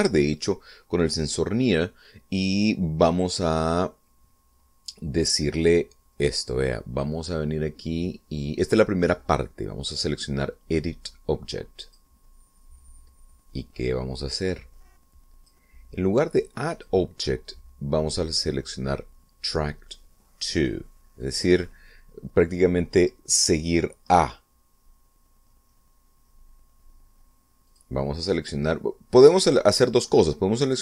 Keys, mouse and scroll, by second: 7.2 click, 12.8 click, 14.8-16.6 drag, 17.6 click, 22.2 click, 28.6 click, 30.4 Escape.